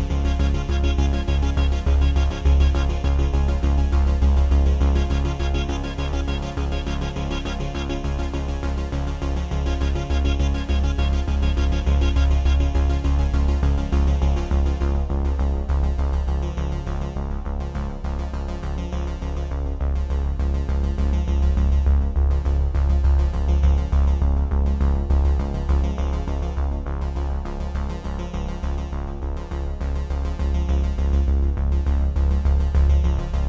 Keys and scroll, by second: 29.8 space, 31.0 ctrl+n, 32.9 ctrl+v.